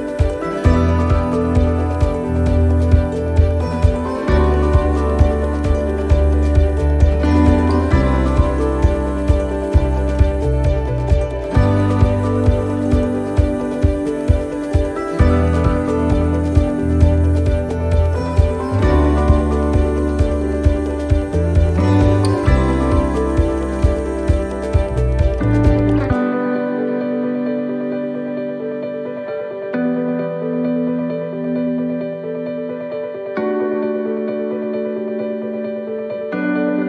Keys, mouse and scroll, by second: 0.0-0.8 scroll down 1, 0.8 click, 3.3 right click, 3.8 alt+shift+right click, 5.1 click, 6.9 shift+middle click, 7.5 middle click, 8.1 shift+middle click, 9.0 right click, 9.5 alt+shift+right click, 10.6 scroll down 1, 10.8 click, 11.9 ctrl+z, 12.8 click, 15.0 scroll up 1, 15.1 right click, 16.1 right click, 16.6 alt+shift+right click, 17.0 alt+shift+right click, 17.6 click, 20.2 middle click, 21.3 shift+middle click, 22.2 right click, 22.9 alt+shift+right click, 23.4 alt+shift+scroll down 1, 24.1 alt+shift+right click, 24.5 middle click, 25.6 middle click, 25.8 middle click, 27.0 middle click, 28.2 click, 29.1 middle click, 30.2 alt+shift+right click, 30.9 shift+scroll up 1, 31.0 alt+shift+right click, 31.8 shift+right click, 32.9 ctrl+z, 33.7 alt+shift+right click, 35.3 click.